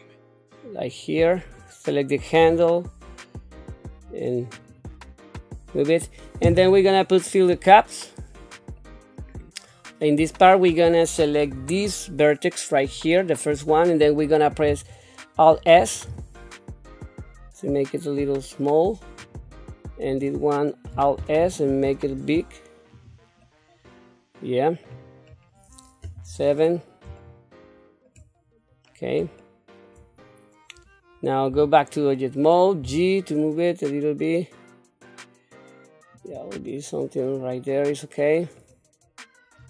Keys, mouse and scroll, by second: 1.2 click, 2.4 g, 7.3 click, 8.8-10.3 middle drag, 10.7 middle click, 11.5 KP_3, 12.7 click, 15.8 alt+s, 20.1 click, 21.1 alt+s, 23.4-24.8 middle drag, 25.3-26.0 scroll down 1, 26.0 KP_7, 27.2 shift+middle click, 28.4-28.9 scroll up 1, 28.9 scroll down 1, 29.4 shift+middle click, 30.1-30.8 scroll up 2, 31.5 Tab, 32.8 g, 36.7-38.5 middle drag.